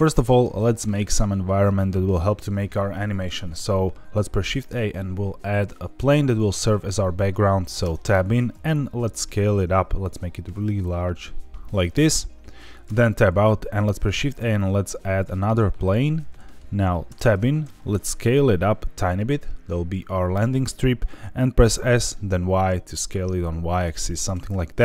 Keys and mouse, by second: 4.2 shift+a, 7.8 Tab, 8.5 s, 11.6 click, 12.8 Tab, 13.8 shift+a, 16.3 middle drag, 17.0 Tab, 17.6 s, 20.3 click, 20.7 middle click, 21.6 s, 22.3 y, 24.1 click.